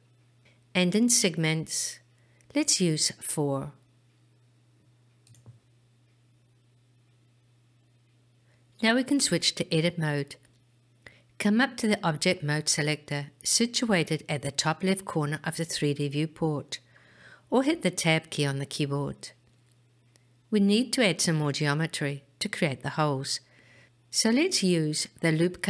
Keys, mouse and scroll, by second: 1.0 click, 1.8 click, 2.7 click, 4.9-8.8 middle drag, 12.2-19.6 drag.